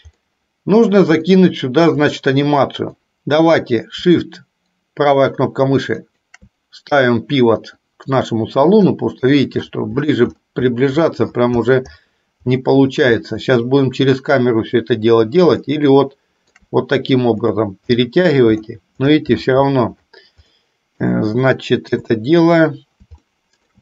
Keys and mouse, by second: 0.2 middle click, 1.3 shift+middle click, 2.4 middle click, 15.7-16.7 shift+middle drag, 20.6 middle click, 22.0 KP_7, 23.4 shift+middle click.